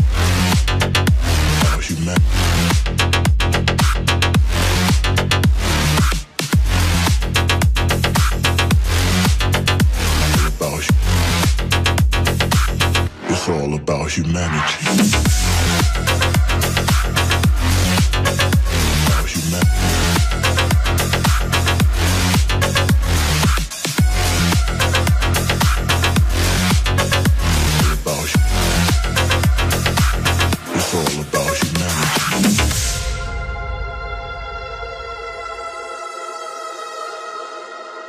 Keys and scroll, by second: 1.9 Return.